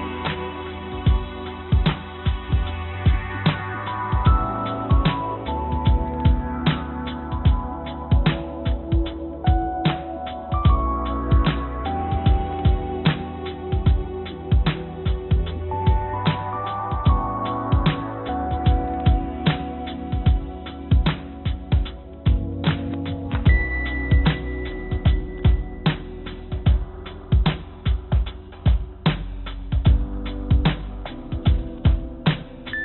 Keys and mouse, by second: 2.3-4.1 middle drag, 7.6 middle click, 12.3 click, 14.0 middle click, 15.8 shift+click, 17.9-20.0 drag, 22.2 click, 23.0 click, 31.9-32.8 drag.